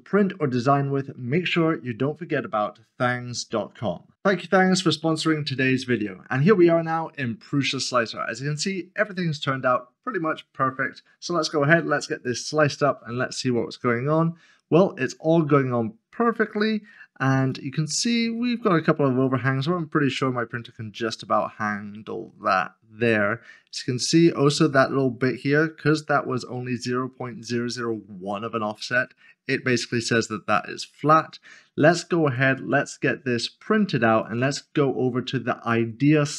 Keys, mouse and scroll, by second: 4.1 click, 16.9 scroll up 1, 17.5 click, 21.1 click, 30.7 click.